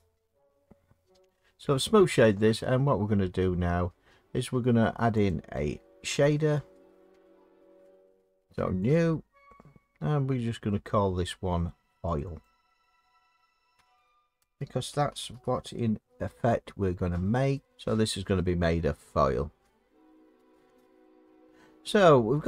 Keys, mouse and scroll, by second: 5.3 click, 8.9 click, 12.2 click, 12.4 click, 13.8-15.3 typing, 17.6 click, 21.6 scroll.